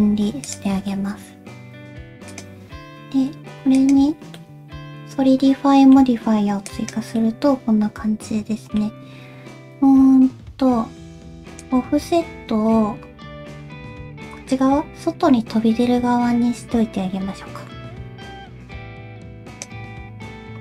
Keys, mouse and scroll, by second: 0.1 Tab, 0.5 click, 0.9 middle click, 4.4 click, 4.4 middle click, 7.2 middle click, 8.9-9.2 scroll up 2, 11.6 click.